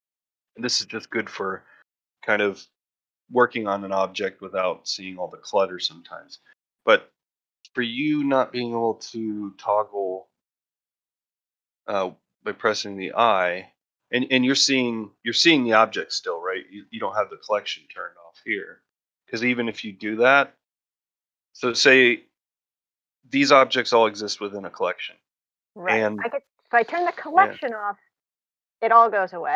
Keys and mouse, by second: 1.2 /, 1.8-2.4 middle drag, 5.8 /, 8.8 click, 12.9 click, 17.7 click, 19.1-20.4 drag, 24.3 click, 28.2 click.